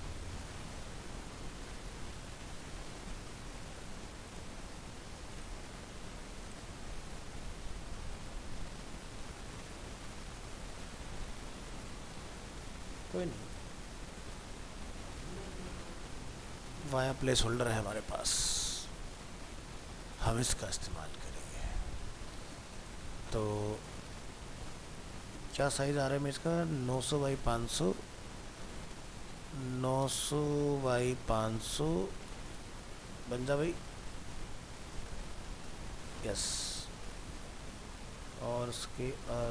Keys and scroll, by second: 25.2 alt+Tab, 36.6 alt+Tab.